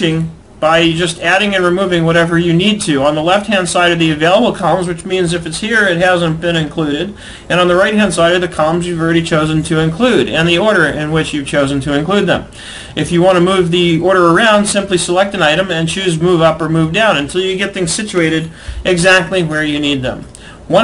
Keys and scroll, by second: 20.7 alt+Tab.